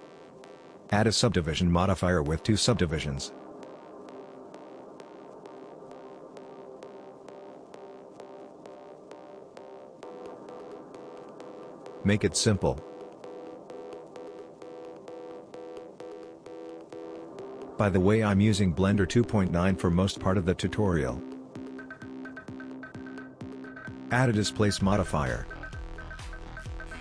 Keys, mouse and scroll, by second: 2.2 click, 8.9 click, 10.4 middle click, 12.5 click, 15.3 click, 16.5 middle click, 21.5 middle click, 23.1 click, 23.6 click.